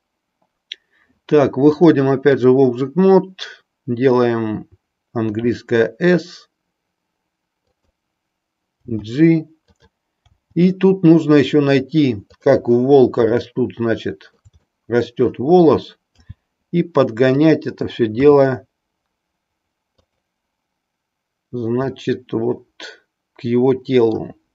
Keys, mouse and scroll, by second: 1.6 click, 5.2 s, 7.8 click, 8.7 g, 9.7 click, 10.4 g, 12.4 click, 13.5-14.6 shift+middle drag, 14.7 middle click, 16.1 g, 17.5 click, 18.3 r, 20.0 click, 22.0-24.4 middle drag.